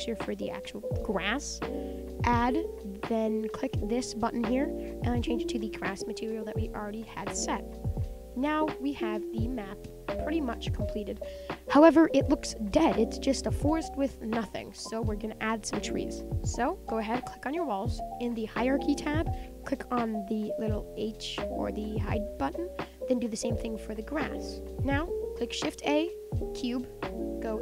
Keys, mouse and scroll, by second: 0.1 scroll up 3, 0.4-1.5 middle drag, 1.5-5.3 drag, 5.7-6.0 shift+middle drag, 6.0-6.5 scroll down 6, 6.5 click, 6.8-7.1 middle drag, 7.1-7.5 scroll up 10, 7.5-9.3 middle drag, 9.3 scroll down 4, 9.6-10.3 middle drag, 10.3-11.8 scroll down 1, 11.8-16.3 scroll down 2, 16.3 click, 17.3 click, 22.1 click, 22.8 click, 24.2 click, 24.6-26.5 middle drag, 26.5 shift+a, 27.5 KP_1.